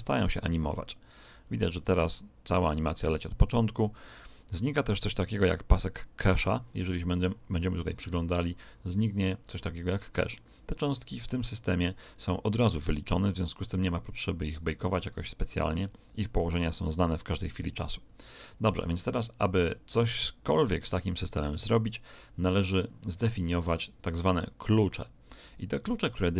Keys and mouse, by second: 7.3-10.3 middle drag, 18.0 Escape.